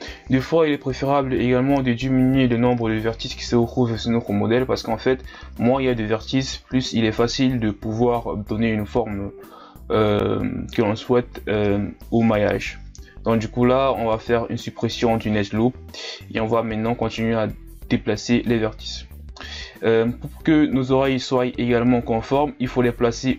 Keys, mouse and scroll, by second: 0.1 z, 0.5 g, 1.7 Tab, 1.9 scroll down 1, 2.1 scroll up 1, 2.3 Tab, 2.9 ctrl+scroll up 2, 3.1-4.3 scroll down 3, 5.2-6.2 scroll up 1, 6.2-6.9 scroll up 5, 6.9 alt+right click, 7.2 scroll down 1, 7.3 middle click, 8.1 KP_1, 8.7 x, 9.9-10.2 scroll down 1, 10.2-10.9 scroll up 2, 10.9 z, 11.5 right click, 11.6 c, 12.1 g, 12.8 z, 13.0 scroll down 1, 13.1 Tab, 13.6 scroll up 1, 13.7 Tab, 14.4 alt+right click, 14.7 ctrl+KP_Add, 14.9 ctrl+KP_Add, 15.3-15.8 scroll down 4, 15.8 click, 16.6 shift+scroll down 1, 16.8 s, 18.7 e, 19.8 r, 21.6 scroll up 1, 21.9 click, 22.6-23.1 scroll down 1, 23.1 KP_3.